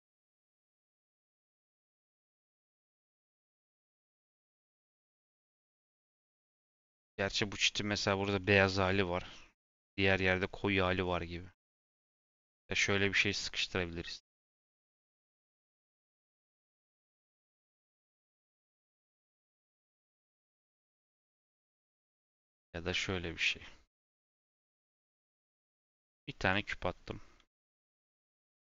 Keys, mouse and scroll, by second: 23.3 click, 24.9 shift+a.